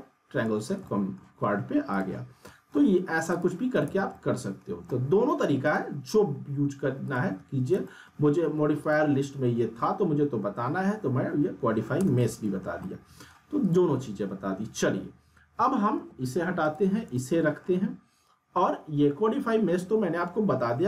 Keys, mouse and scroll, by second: 1.9 click, 2.4 middle click, 3.3 click, 3.8 z, 4.1-4.8 alt+middle click, 4.6 scroll down 1, 4.9-5.5 alt+middle click, 5.6 click, 7.2 z, 7.8-8.4 alt+middle click, 8.3 scroll down 1, 8.8 click, 12.0 z, 12.2-12.8 alt+middle click, 12.6 scroll down 1, 12.8-13.4 middle click, 13.6 click, 16.6 click, 17.1-17.8 alt+middle drag.